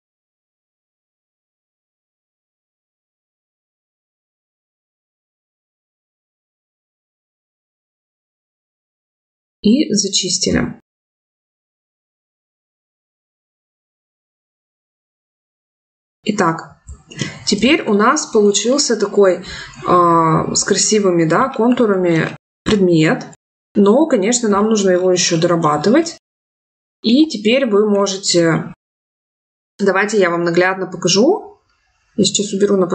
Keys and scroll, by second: 2.3 ctrl+z.